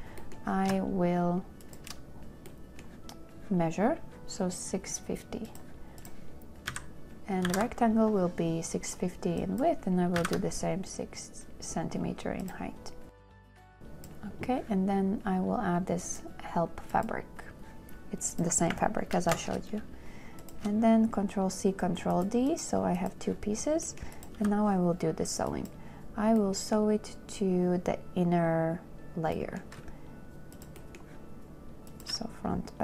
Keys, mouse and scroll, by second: 1.9 shift+click, 7.0 KP_6, 7.8 KP_5, 8.0 KP_0, 10.5 KP_6, 10.5 KP_0, 13.7 a, 19.4 ctrl+d, 20.7 shift+click, 24.7 n, 30.8 shift+click, 31.0 shift+click, 31.1 shift+scroll, 32.2 shift+click, 32.7-32.8 scroll.